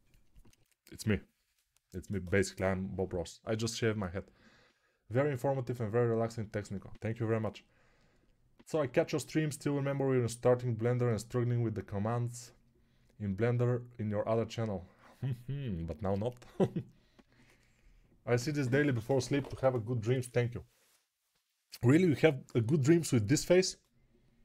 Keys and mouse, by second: 0.0 middle click, 0.7-24.4 middle drag.